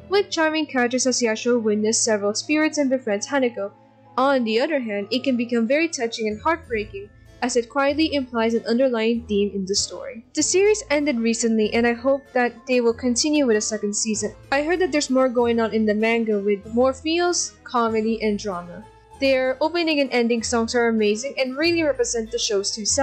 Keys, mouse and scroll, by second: 0.0 ctrl+=, 2.7 scroll down 1, 7.7 g, 9.5 ctrl+z, 11.2 ctrl+z, 17.5 ctrl+z, 21.5 ctrl+=.